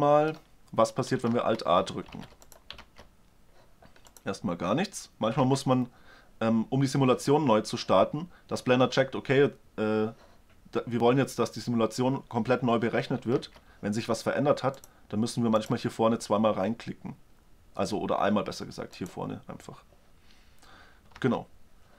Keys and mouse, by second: 1.2 alt+a, 1.9 alt+a, 2.7 alt+a, 5.2 alt+a, 5.7-6.1 middle drag, 13.2 alt+a, 18.7-20.5 drag, 20.9 alt+a.